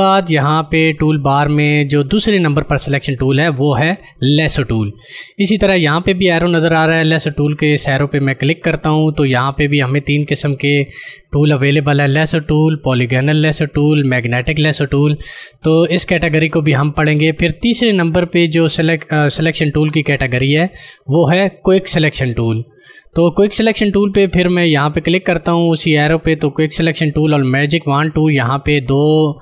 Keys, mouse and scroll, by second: 8.5 click, 20.5 click.